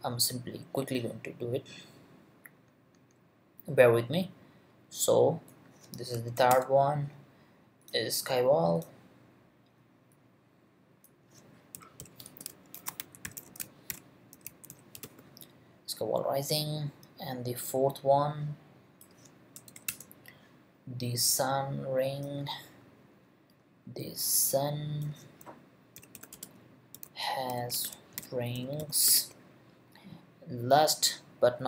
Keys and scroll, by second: 6.3 shift+', 6.5 shift+Return, 11.5-15.5 typing, 19.7 shift+', 19.9 shift+Return, 25.7-29.6 typing.